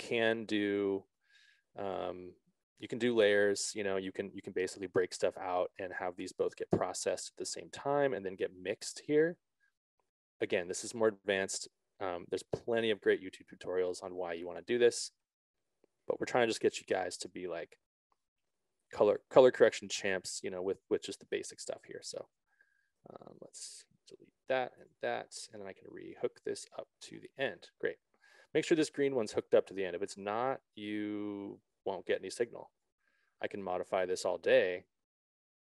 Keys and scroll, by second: 21.7 ctrl+z, 24.6 BackSpace.